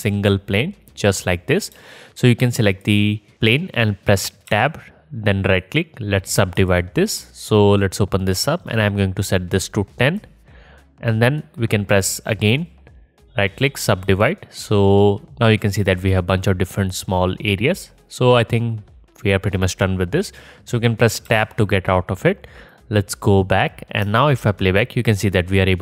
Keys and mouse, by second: 0.0 Tab, 1.7 Tab, 4.5 Tab, 5.6-9.4 drag, 21.3 Tab, 24.1 space, 25.5-25.8 middle drag.